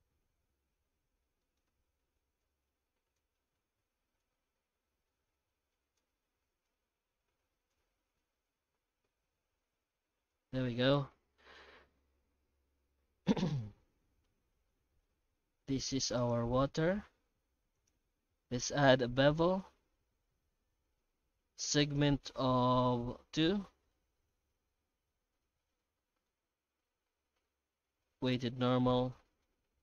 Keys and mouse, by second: 0.0 typing, 2.4-3.2 drag, 4.2-6.0 drag, 6.6-7.7 drag, 8.5-10.3 drag, 10.7-11.8 middle drag, 15.0-15.7 middle drag, 16.2 right click, 25.8 middle click, 29.1 middle click.